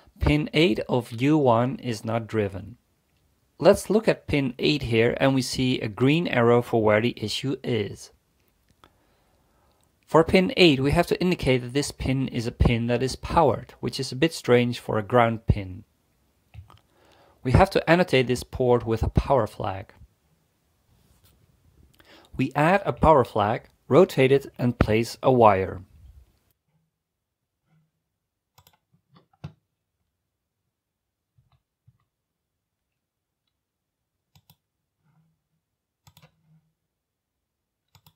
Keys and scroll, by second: 23.0 typing, 24.7-25.9 typing, 31.4 r, 31.9 r.